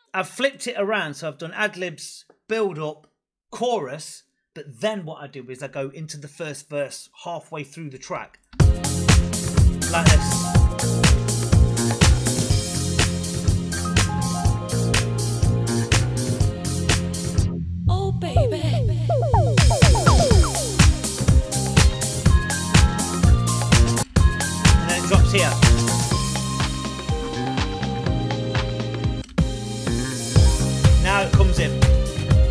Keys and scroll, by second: 8.4 space, 23.8 space, 29.0 space.